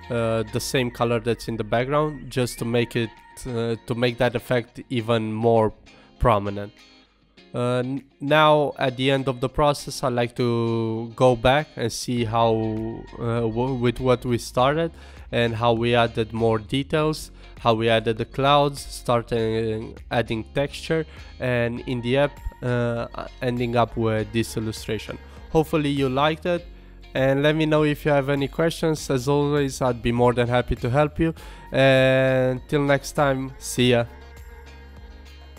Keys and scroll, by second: 9.4 super+t, 10.7 super+t.